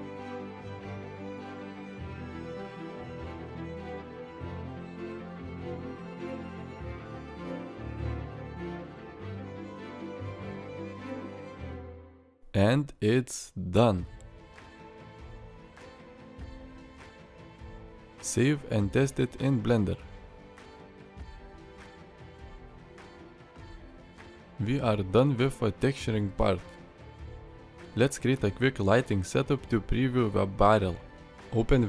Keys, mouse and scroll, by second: 23.6 alt+r, 24.5 middle click, 27.3 middle click.